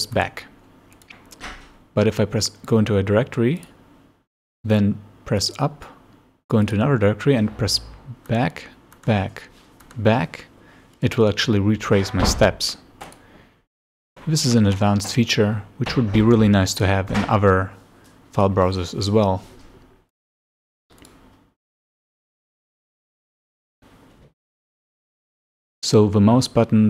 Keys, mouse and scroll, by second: 0.2-0.5 scroll down 2, 1.0 click, 3.6 click, 5.4 click, 6.7 click, 8.3 scroll down 2, 9.0-9.3 scroll down 1, 9.9-10.2 scroll down 1, 11.0 click, 13.1 click, 20.2 click, 21.0 click.